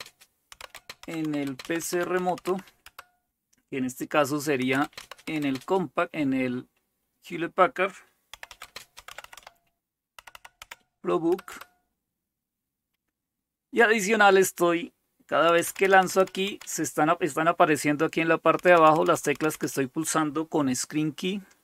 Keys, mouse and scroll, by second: 0.0-5.7 typing, 8.1-12.0 typing, 15.5-19.5 typing.